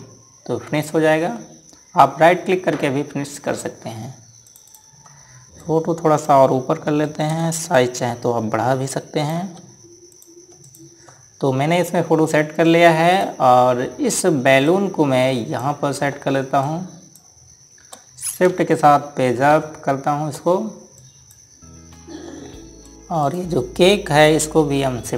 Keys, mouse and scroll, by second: 0.0 click, 4.7 ctrl+Num_Lock, 5.2 click, 6.3 click, 8.5 click, 10.9 click, 11.4 click, 13.9 click, 17.4 click, 20.3 Page_Up, 21.7 click.